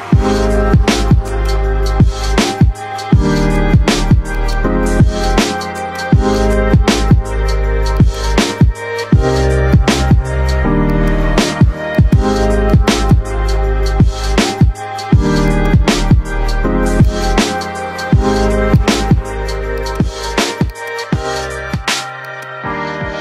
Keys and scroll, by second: 0.1 F3, 13.6 shift+F2, 14.0 Escape, 21.3 e, 21.7 Escape.